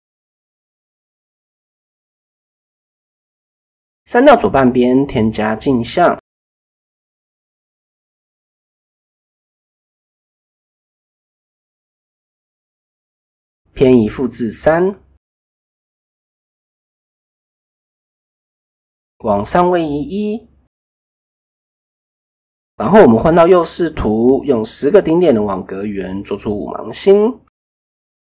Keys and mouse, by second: 0.4 ctrl+a, 2.4 Tab, 2.7 click, 3.5 x, 6.9-7.5 drag, 9.8 a, 10.7 ctrl+e, 13.5 click, 14.7-15.7 drag, 16.9-18.9 drag, 20.0 Tab, 21.8 KP_3, 23.0 shift+a, 25.9-26.4 drag, 26.9-28.0 drag, 28.0 middle click.